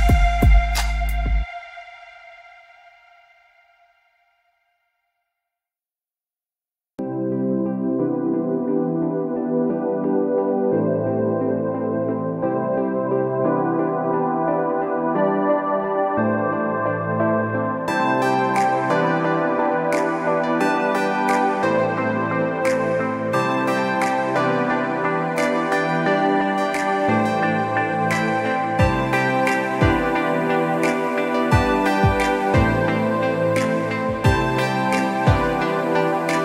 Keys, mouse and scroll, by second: 0.1 space, 0.2 alt+scroll up 1, 0.3 alt+scroll down 1, 0.5 click, 0.8 space, 1.0 click, 1.8 ctrl+z, 2.2 click, 3.1 click, 4.1-4.7 scroll down 2, 4.3 click, 4.9 click, 6.1 space, 6.8 click, 7.1 click, 7.6 click, 8.8 scroll up 1, 8.9 click, 11.1 space, 11.4 click, 12.4 scroll up 1, 12.5-12.8 alt+scroll down 2, 12.9 scroll up 1, 13.3 click, 15.3 click, 15.5 scroll up 1, 15.8 click, 16.2 ctrl+z, 16.6 click, 17.1 click, 17.2 alt+scroll up 1, 17.4 click, 19.0 ctrl+z, 19.1 alt+scroll up 2, 19.3 click, 19.7 space, 19.8 alt+scroll down 1, 20.2 ctrl+z, 20.5 scroll up 1, 20.7 click, 21.0 click, 21.1 space, 21.3 click, 22.1-22.6 scroll up 2, 22.2 space, 23.4 alt+scroll up 1, 23.5 z, 23.8 click, 24.1 alt+scroll down 1, 25.1 click, 25.9 click, 26.3 click, 26.7 Delete, 27.0 click, 27.5 click, 27.9 Delete, 28.8 click, 28.9 alt+scroll up 2, 29.3 click, 30.0-30.3 scroll down 2, 30.3 space, 30.8 click, 31.7 alt+scroll up 1, 31.9 click, 32.5 scroll up 1, 32.8 ctrl+s, 33.2 click, 33.5 alt+scroll up 1, 33.6 scroll down 1, 34.0 alt+scroll up 1, 34.0 scroll down 1, 34.1 scroll.